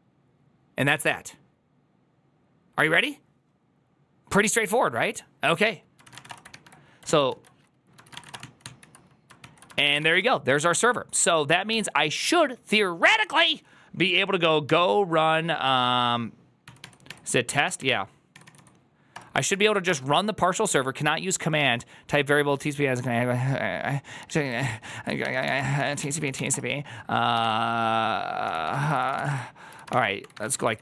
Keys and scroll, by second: 5.9-6.6 typing, 6.9 alt+[, 7.2 alt+{, 7.8-8.6 typing, 9.3 ctrl+t, 9.6-15.1 typing, 10.7 Return, 11.1 ctrl+a, 16.5-19.7 typing, 16.7 Tab, 24.8 ctrl+a, 25.1-30.8 typing.